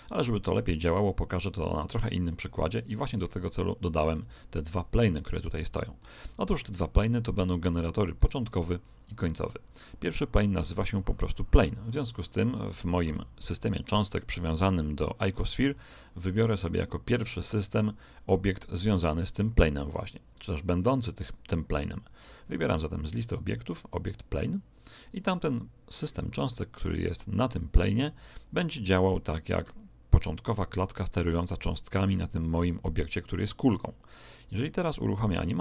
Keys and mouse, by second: 2.1-7.7 middle drag, 8.1 right click, 13.1 right click, 20.7 click.